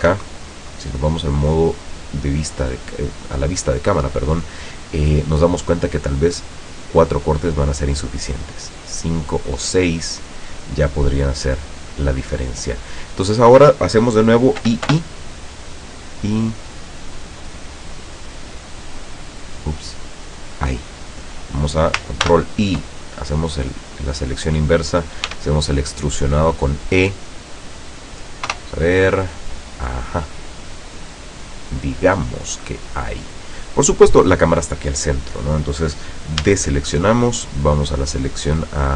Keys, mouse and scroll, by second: 0.1 KP_0, 1.7-2.0 scroll up 2, 2.3-2.9 scroll up 4, 6.6 click, 8.8 click, 9.7 middle click, 14.7 i, 20.5 click, 22.3 ctrl+i, 23.5 scroll down 2, 24.0 middle click, 25.4 e, 27.9 click, 28.5 KP_0, 29.9-30.2 scroll down 2, 30.8 middle click, 31.4 middle click, 31.9 middle click, 32.2-33.5 middle drag, 36.5 a, 37.6 click.